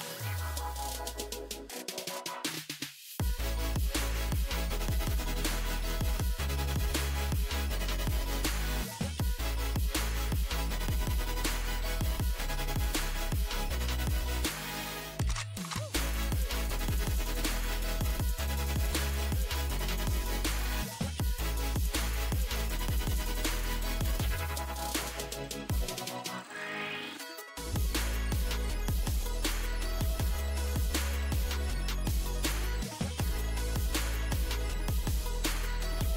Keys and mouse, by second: 14.7 z, 16.4 z, 17.2 Tab, 21.3 z, 22.7-24.7 drag, 23.2 a, 24.0 c, 26.4-27.4 drag, 27.0 s, 32.8 z, 33.1 click, 35.1 ctrl+r, 36.0 click.